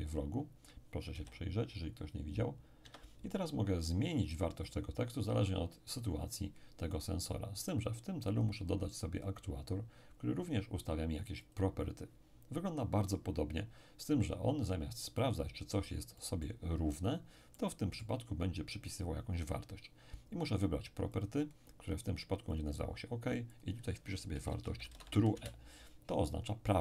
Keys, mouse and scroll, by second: 1.1 p, 2.8 Escape, 6.9-9.4 middle drag, 8.3 click, 11.4 click, 15.2-17.4 middle drag, 17.5-19.0 middle drag, 21.2 click, 22.5-24.6 drag, 24.1-25.4 typing.